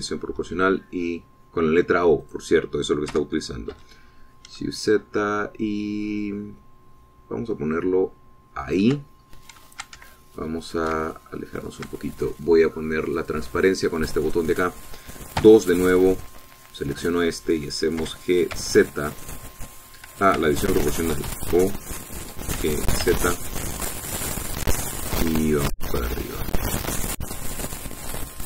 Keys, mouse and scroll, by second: 0.5 o, 1.4 s, 3.2-8.3 drag, 4.1 g, 4.8 z, 9.6 shift+click, 10.2 shift+scroll up 3, 11.1-12.9 ctrl+shift+middle drag, 14.2 click, 16.4 2, 17.2 click, 17.8 click, 19.0 g, 19.6 z, 21.4 Escape, 22.3 o, 23.6 g, 24.1 z, 24.8 middle click, 25.4 middle click, 25.8 middle click.